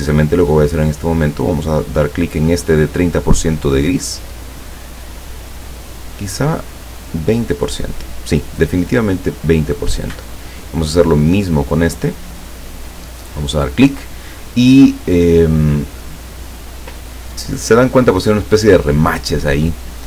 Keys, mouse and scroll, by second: 4.2 click, 7.0 click, 9.3 click, 10.4 click, 13.0 click.